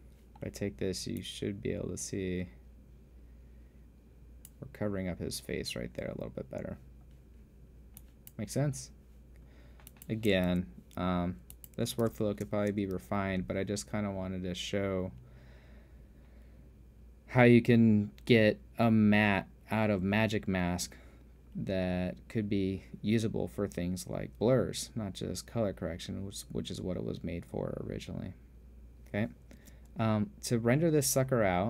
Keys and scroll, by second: 11.1 super+f, 12.7 super+f, 13.1 super+space, 13.8 space, 30.2 space.